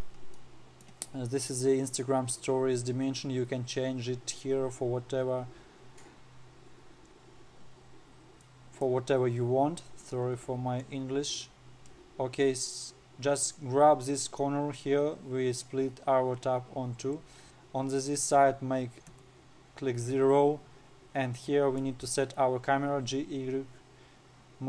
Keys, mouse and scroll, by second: 0.9-3.9 middle drag, 9.0-11.3 middle drag, 11.3-17.9 drag, 19.6 KP_0, 21.9-22.6 middle drag, 22.6-23.3 scroll down 2, 23.3 g.